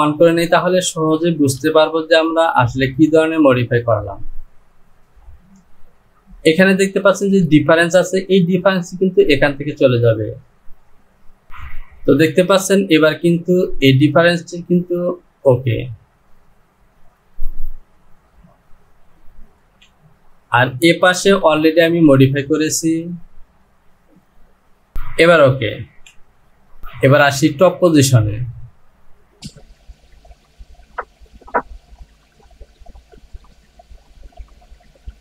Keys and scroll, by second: 1.6 Return, 19.6 Home, 26.0 Home.